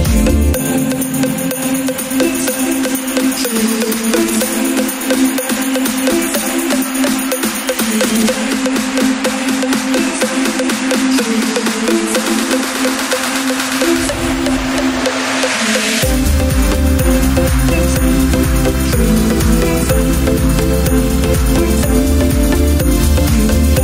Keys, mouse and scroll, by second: 9.5-16.8 drag, 16.9-19.8 drag, 22.1 click, 23.1 click.